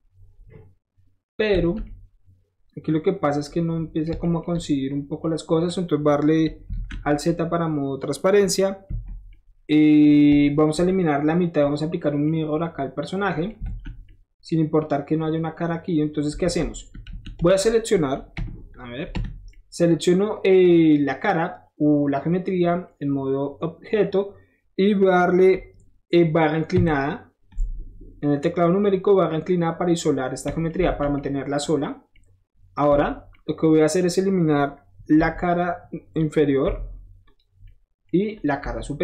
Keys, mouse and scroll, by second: 1.6 alt+z, 4.1 middle click, 4.4 shift+middle click, 5.7 shift+middle click, 6.7 alt+z, 10.7 shift+middle click, 11.0-12.0 shift+middle drag, 12.3 shift+middle click, 13.5 middle click, 13.7 alt+z, 16.4 alt+z, 17.1 alt+z, 18.3 Escape, 24.0-28.8 middle drag, 30.7 middle click, 30.9 alt+z, 32.9 Tab, 33.2-34.0 scroll up 2, 34.0 scroll up 1, 35.5 click, 36.6 Delete, 37.3 click, 38.3 click.